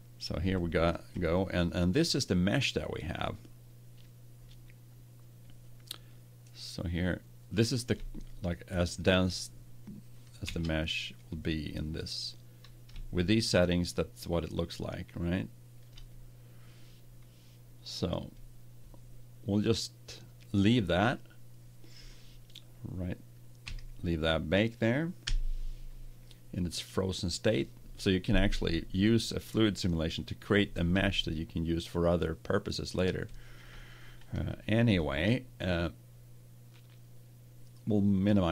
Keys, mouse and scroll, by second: 2.7-4.1 middle drag, 6.7 middle click, 9.0-10.4 middle drag, 10.4 ctrl+Tab, 11.7-15.1 middle drag, 16.2-18.2 middle drag, 23.6 a, 25.2 KP_1, 31.0-33.0 middle drag, 33.2-35.0 middle drag.